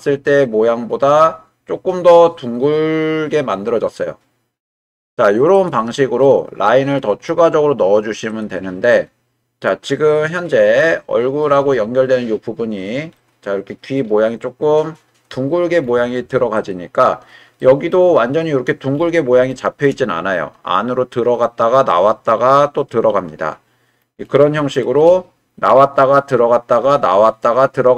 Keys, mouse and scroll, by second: 5.5 click, 6.2-7.3 middle drag, 8.3 click, 9.0-11.4 middle drag, 13.1-13.9 middle drag, 16.6 click, 17.6 middle click, 19.5-19.9 shift+middle drag, 24.7 shift+middle drag.